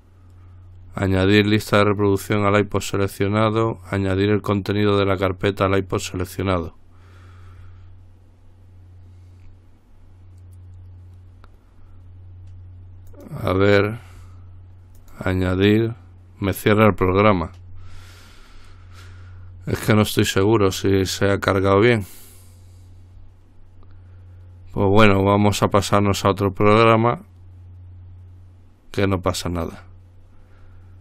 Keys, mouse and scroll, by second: 6.6 click, 13.3 click, 15.2 click, 20.1 click.